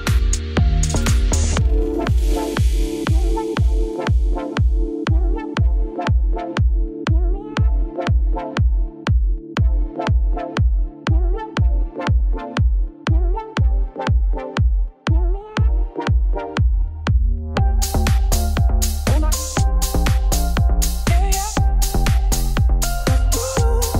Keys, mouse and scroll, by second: 0.7 middle click, 1.1-2.0 scroll down 5, 2.0-2.4 scroll up 8, 2.4 middle click, 2.6 click, 2.7 Tab, 3.3-4.3 alt+drag, 4.3 KP_Add, 8.8 middle click, 9.0 s, 10.7 scroll down 2, 10.9-12.3 middle drag, 12.3-12.7 scroll down 1, 12.7 click, 13.1-14.5 middle drag, 14.5 ctrl+s, 15.0 middle click, 15.2 scroll up 2, 15.4-16.5 middle drag, 16.5-20.7 shift+right drag, 20.7-21.9 drag, 21.9 click, 22.8-23.9 middle drag.